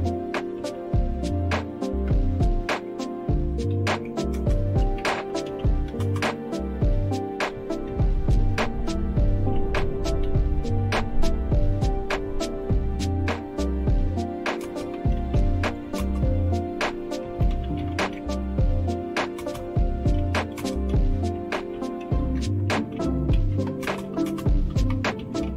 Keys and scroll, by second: 0.0-1.2 typing, 1.9 Return, 3.5-6.4 typing, 7.5-7.9 typing, 9.3-10.7 typing, 14.6-25.5 typing.